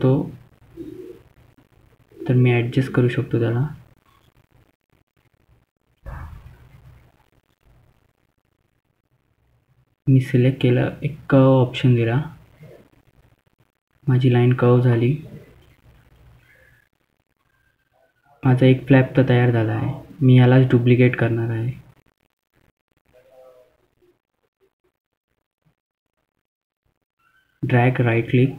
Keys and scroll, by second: 13.6 F3, 14.0 F3, 14.4 F3, 16.6 ctrl+z, 18.8 ctrl+z, 21.6 ctrl+z, 22.7 F2.